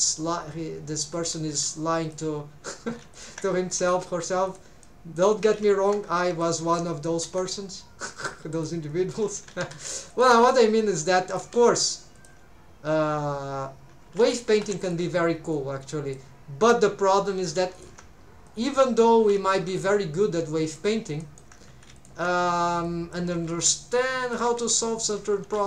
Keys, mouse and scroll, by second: 1.1 shift+click, 1.5 g, 2.0 shift+click, 3.0 alt+a, 3.2 alt+shift+click, 3.7 s, 4.5 shift+click, 4.8 shift+middle click, 5.5 alt+a, 6.1 2, 6.4 alt+shift+click, 7.2 s, 8.0 shift+click, 8.2 g, 8.5 shift+click, 9.4 alt+a, 9.6 3, 10.1 alt+shift+click, 10.7 s, 11.3 click, 11.4 g, 12.2 shift+click, 14.0 alt+a, 14.5 3, 14.8 alt+shift+click, 15.5 click, 17.4 alt+a, 17.8 alt+shift+click, 18.5 click, 19.4 alt+a, 19.5 alt+shift+click, 20.2 right click, 20.2 click, 21.2 shift+middle click, 21.9 alt+a, 22.0 alt+shift+right click, 22.0 alt+shift+click, 22.8 click, 23.5 s, 24.2 shift+click, 24.5 g, 25.0 shift+right click, 25.0 shift+click, 25.5 alt+a.